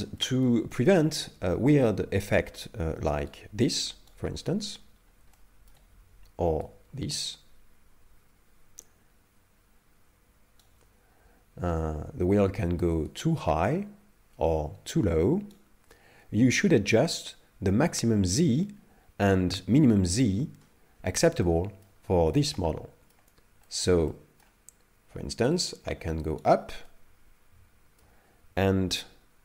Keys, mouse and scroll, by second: 0.2 shift+middle click, 0.7 middle click, 1.5 shift+middle click, 3.4 right click, 4.2 right click, 4.4 scroll up 2, 4.8 scroll down 1, 5.3 shift+middle click, 6.7 right click, 13.2 right click, 13.6 right click, 21.4 middle click, 22.5 shift+middle click, 23.6 middle click, 24.1 middle click, 25.6 right click, 25.7 right click, 26.9 middle click.